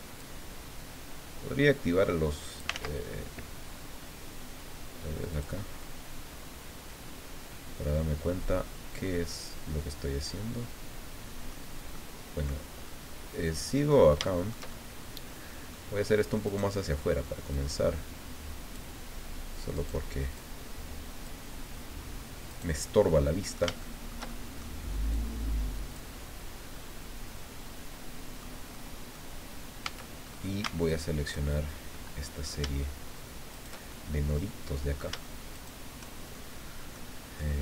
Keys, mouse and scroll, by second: 0.2-2.8 drag, 2.7 ctrl+z, 5.3 click, 5.8-11.7 middle drag, 11.9 middle click, 12.9-14.1 middle drag, 14.2 shift+middle click, 15.1 middle click, 16.4 right click, 17.5-19.0 drag, 19.7 right click, 20.3-21.4 drag, 22.5 right click, 22.9 middle click, 23.8 shift+middle click, 25.1-26.1 drag, 26.1-26.4 scroll down 2, 26.7-28.6 middle drag, 28.7 middle click, 29.8 a, 30.2-30.6 scroll up 1, 30.9 alt+shift+right click, 31.8 shift+scroll down 2, 31.9 click, 33.5 shift+right click, 33.9-35.1 shift+drag, 35.5 shift+right click, 36.4 shift+click, 37.4 click.